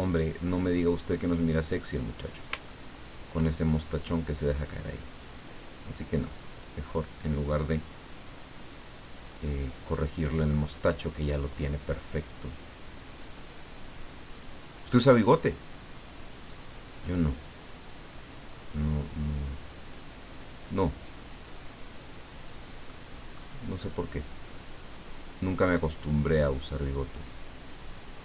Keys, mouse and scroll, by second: 0.0-2.4 drag, 2.6-3.1 ctrl+scroll up 2, 5.2-6.8 drag, 8.2-9.8 drag, 9.9 middle click, 9.9-10.8 scroll up 1, 12.2-14.6 drag, 17.2-18.5 drag, 18.8 click, 19.8 click, 22.9-23.9 middle drag, 24.7-27.4 drag.